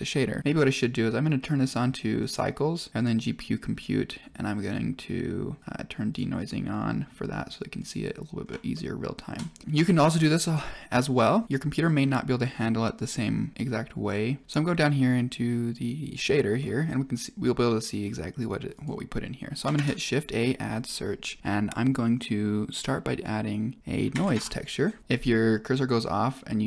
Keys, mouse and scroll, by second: 0.6 click, 1.6-2.2 drag, 2.9-3.7 drag, 6.0 click, 6.3 click, 8.7 click, 8.7-9.2 shift+middle drag, 16.5 middle click, 18.7 click, 19.7 shift+a, 25.0 shift+a.